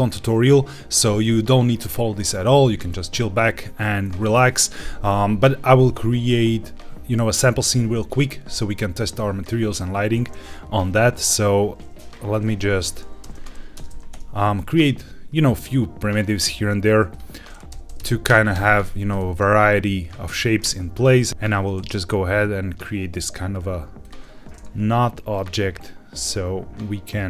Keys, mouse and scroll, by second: 12.5 Tab, 13.1 g, 13.3 z, 13.4 KP_1, 13.7 KP_Enter, 14.0 Tab, 14.5 shift+a, 17.6 Tab, 17.6-19.1 typing, 18.2 KP_Enter, 18.4 Tab, 20.2 click, 20.6 shift+a, 25.2 click.